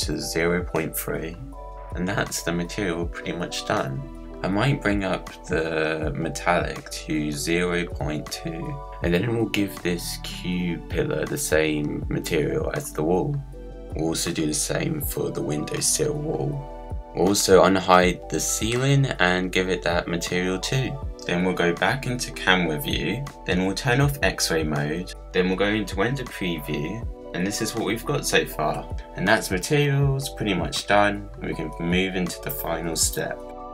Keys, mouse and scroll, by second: 1.2-4.6 drag, 5.3 Tab, 6.0 scroll up 2, 6.2-8.8 middle drag, 9.1-11.5 drag, 11.8 scroll down 1, 12.1 middle click, 12.9 click, 14.0-16.5 drag, 17.5-19.1 drag, 20.3 click, 22.3-23.6 drag, 24.6 click, 27.3-28.8 drag, 31.9 click.